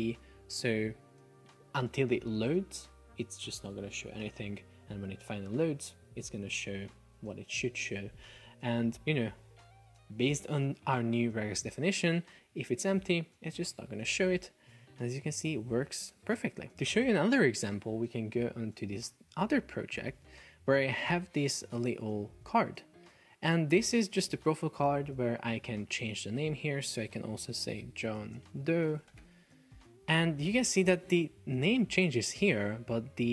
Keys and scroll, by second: 27.1 super+a, 27.7-29.1 typing, 29.8 Return.